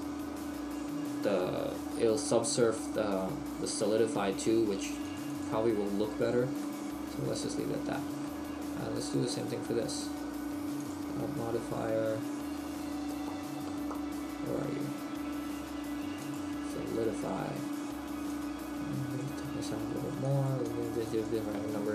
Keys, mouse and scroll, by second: 1.9 middle click, 5.0 click, 6.6 click, 6.6 middle click, 9.0 middle click, 9.0 right click, 10.9 click, 18.4 click, 20.3 click.